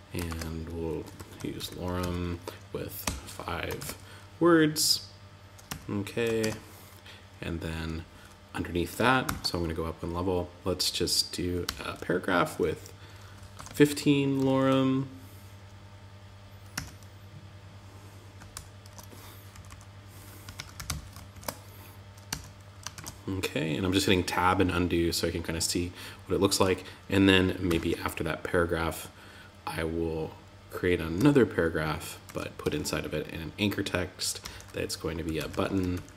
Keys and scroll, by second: 3.1 super+Right, 5.0 Tab, 5.8 super+z, 13.1 shift+., 16.1 Tab, 18.3 Tab, 18.9 Left, 20.7 super+Right, 21.6 Tab, 22.3 super+z, 31.6 shift+..